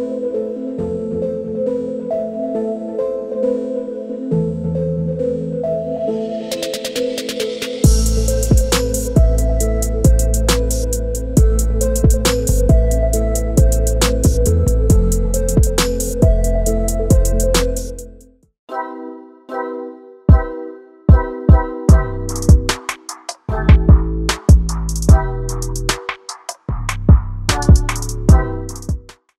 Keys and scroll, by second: 5.9-6.8 typing, 11.3-12.0 typing.